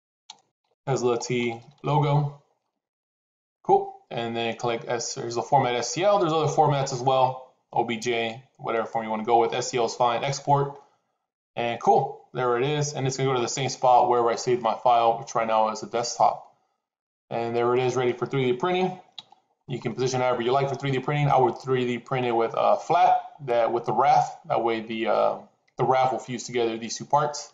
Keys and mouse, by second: 1.8 o, 5.7-8.9 drag, 10.2 click, 17.7 middle click, 19.1 n, 19.7-22.1 middle drag.